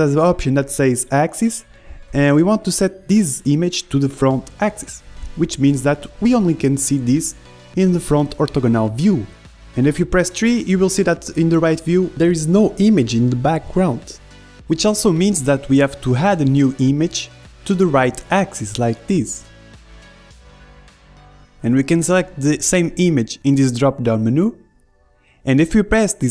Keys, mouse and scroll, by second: 1.0-8.8 drag, 10.9 KP_3, 14.9 KP_1, 16.4 middle click, 17.9-21.6 drag, 21.4 middle click, 22.6-26.3 drag.